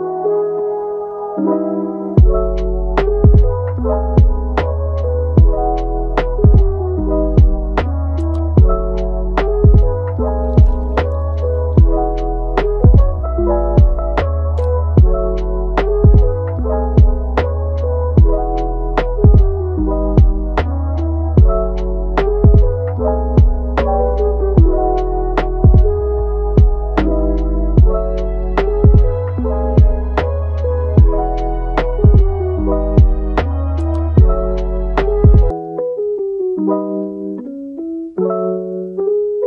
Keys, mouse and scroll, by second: 0.2 scroll up 2, 0.5-1.9 shift+middle drag, 1.9-6.8 drag, 6.8 scroll down 1, 7.1 middle click, 7.7 scroll up 1, 7.9 middle click, 8.6-10.4 drag, 10.4 middle click, 10.9 click, 11.9 scroll down 3, 12.1 middle click, 12.5-13.3 scroll up 4, 13.3-16.9 drag, 16.9-17.3 scroll down 1, 17.3 middle click, 17.9 scroll up 2, 18.0 middle click, 18.8-22.1 drag, 22.1 scroll down 1, 22.3 middle click, 22.7-23.4 scroll up 1, 23.4-24.5 drag, 24.5 scroll up 2, 24.7 middle click, 25.1-25.8 scroll up 1, 25.8-28.0 drag, 28.0 scroll down 1, 28.3-31.2 middle drag, 31.2 scroll down 1, 31.4 middle click, 32.1 scroll up 2, 32.7-33.5 drag, 33.5-33.9 scroll down 5, 34.1-34.6 middle drag, 34.6 scroll up 1, 35.1-35.4 scroll down 1, 35.6 click, 36.2-37.5 shift+middle drag, 37.5 click, 38.2 scroll down 3, 38.4 middle click, 39.2 click.